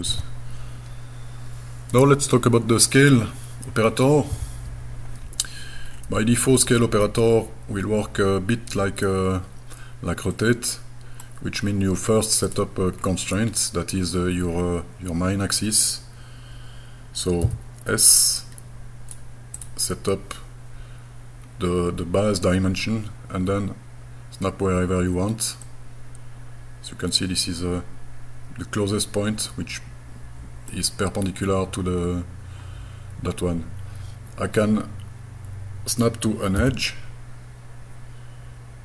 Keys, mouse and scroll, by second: 5.9-6.4 scroll down 1, 6.6-9.1 middle drag, 6.6 scroll down 3, 10.4 middle click, 11.7-12.3 scroll up 4, 12.5 click, 13.0-13.5 scroll down 2, 13.6-14.1 scroll up 2, 14.6 scroll down 2, 15.1-15.5 scroll up 1, 17.4 s, 18.4 click, 19.6 click, 25.7-30.7 middle drag, 36.6 e.